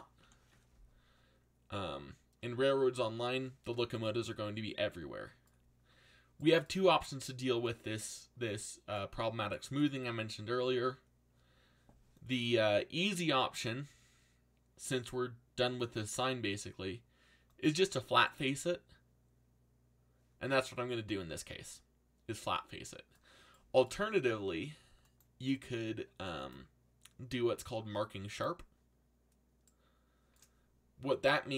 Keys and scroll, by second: 0.2 ctrl+l.